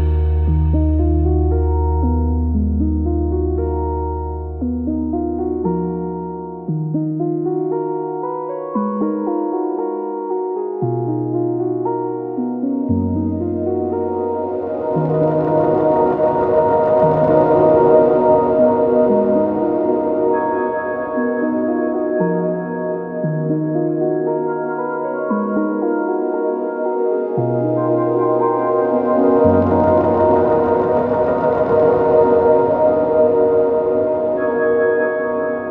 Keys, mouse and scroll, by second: 0.5 Tab, 2.3 2, 4.2 click, 4.3 shift+middle click, 4.5 shift+click, 4.7-6.8 middle drag, 4.8-16.0 right drag, 5.8 1, 6.8 2, 7.3 click, 7.9 shift+click, 9.1 1, 9.4 click, 9.7 shift+click, 10.2 m, 11.3-12.4 middle drag, 12.3 click, 12.7 shift+click, 12.7 shift+middle click, 13.1 shift+r, 13.4 click, 13.4 middle click, 15.4 Tab, 16.0-16.8 middle drag, 16.8-35.7 right drag, 18.5 Tab, 21.2 Tab, 21.6 alt+v, 23.6 alt+x, 24.5 click, 24.5 middle click, 25.4 alt+x, 26.1-28.3 drag, 27.3-28.3 middle drag, 28.8 alt+v.